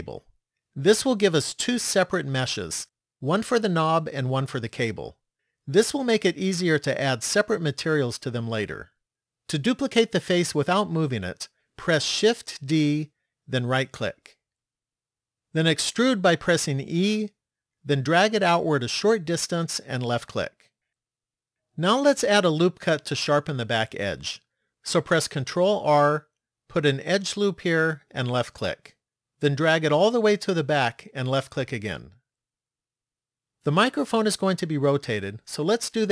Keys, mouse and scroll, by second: 12.6 shift+d, 16.6 e, 25.2 ctrl+r.